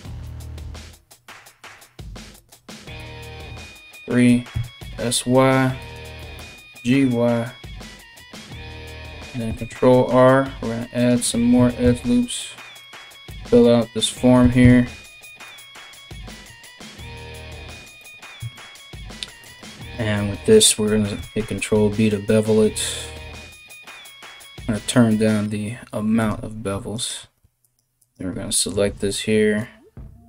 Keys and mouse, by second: 2.6 KP_3, 4.1-15.7 drag, 4.1 s, 5.8 g, 9.1 ctrl+r, 11.1 s, 12.9 KP_1, 14.0 s, 15.7-19.0 middle drag, 15.7 g, 19.0 alt+right click, 19.2 alt+middle click, 19.4 alt+right click, 19.6-26.5 alt+middle drag, 20.7 ctrl+b, 26.5 alt+right click, 26.6 alt+middle click, 27.2 alt+right click, 27.3 alt+middle click, 27.6 alt+right click, 27.8-30.2 alt+middle drag, 28.4 alt+s.